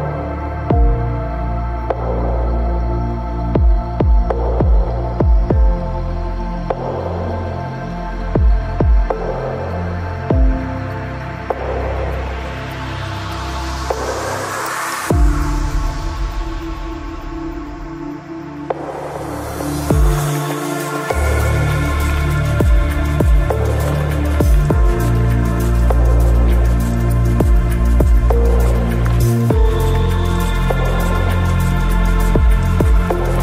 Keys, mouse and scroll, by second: 0.3 Tab, 2.2 z, 2.9 Tab, 5.2 c, 6.6-8.4 right drag, 11.9 i, 12.6 z, 12.9 middle click, 13.9-15.6 drag, 15.0 ctrl+b, 16.1 Tab, 16.6 ctrl+s, 17.6 KP_3, 18.0 z, 26.1-27.6 middle drag, 27.1 z, 28.3 z, 31.6 Tab.